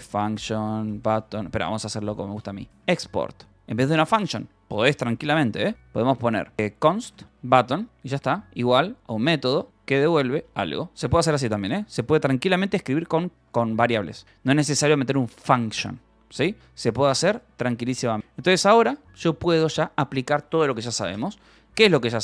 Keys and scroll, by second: 0.0-9.4 typing, 5.7 Escape, 10.1 Return, 13.3 Escape, 13.5 e, 14.2 j, 18.3 space, 21.3 Escape.